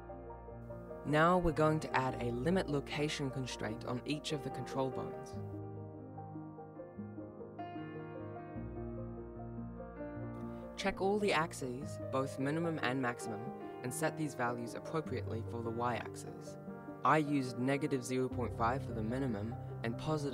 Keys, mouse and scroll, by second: 0.4 right click, 1.1 ctrl+Tab, 3.5 click, 4.9 click, 5.4 click, 6.1 click, 11.3 click, 11.9 click, 12.8 click, 13.6 click, 14.5 click, 15.3 click, 16.2 click, 17.4 click.